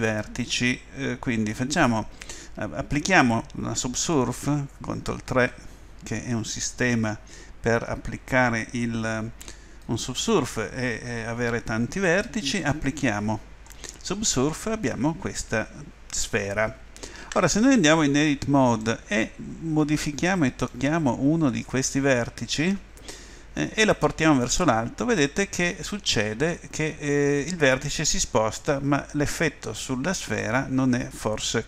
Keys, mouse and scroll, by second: 5.0 ctrl+3, 9.8-12.6 middle drag, 13.6 click, 13.8 click, 14.2-17.3 middle drag, 17.3 Tab, 18.8 middle click, 19.1 middle click, 19.3 middle click, 20.2 middle click, 21.7-23.5 right drag, 23.5-25.1 middle drag, 25.1-30.5 drag.